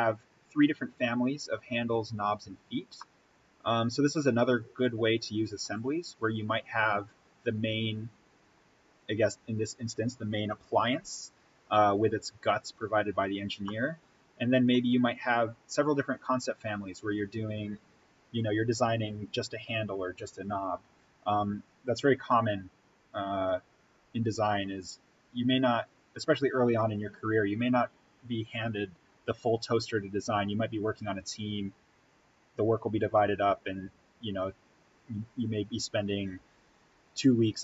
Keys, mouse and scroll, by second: 2.9-5.7 middle drag, 5.7-6.6 scroll up 1, 8.5-8.8 scroll down 1, 13.5-17.1 middle drag, 21.7-22.1 scroll down 1, 22.1 middle click, 22.4-24.7 middle drag, 24.6 scroll up 1.